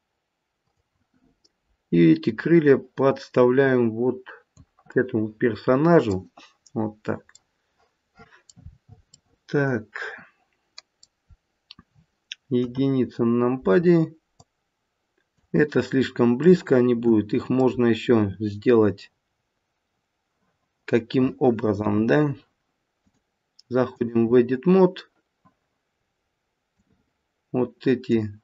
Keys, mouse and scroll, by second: 0.6 click, 2.2 click, 4.9 middle click, 6.7-7.4 scroll up 4, 7.4 middle click, 8.6-9.3 scroll down 3, 9.1 middle click, 11.3-11.8 scroll down 1, 12.5 KP_1, 13.0-14.3 scroll up 2, 14.3 click, 16.3 middle click, 17.7-19.5 scroll down 1, 19.5-20.8 scroll down 1, 21.8 KP_1, 22.9 click, 26.7 click.